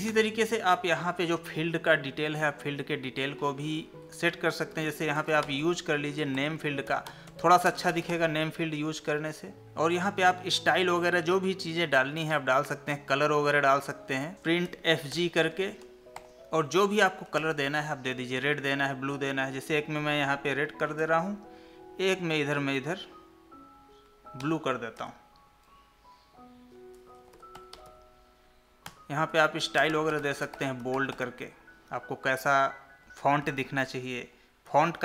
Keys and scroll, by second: 7.7 space, 14.3 space, 15.5 Tab, 21.0 ctrl+c, 25.0 ctrl+v, 34.7 ctrl+c.